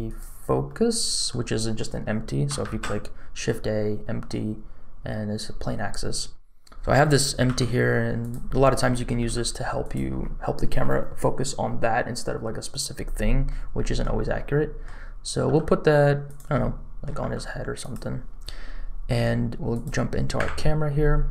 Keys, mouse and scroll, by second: 0.0 click, 0.6 middle click, 2.6 shift+a, 6.6 middle click, 7.4 g, 8.5 middle click, 9.2 g, 13.4 middle click, 14.3 middle click, 15.4 g, 16.5 middle click, 17.1 g, 19.7 click, 20.4 KP_0.